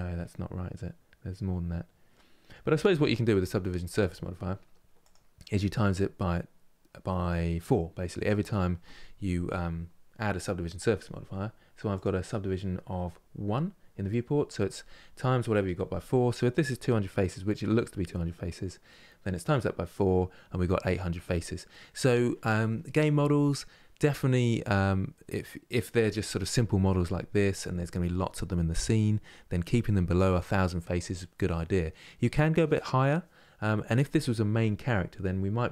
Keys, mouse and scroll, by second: 0.0-3.0 middle drag, 4.7-7.7 drag, 11.6-14.6 drag, 16.4-19.4 middle drag, 35.2-35.7 scroll down 2.